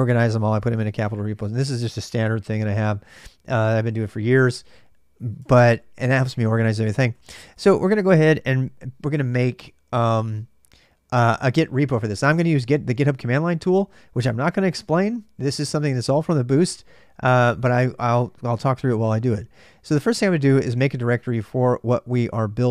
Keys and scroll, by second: 4.7-7.6 typing.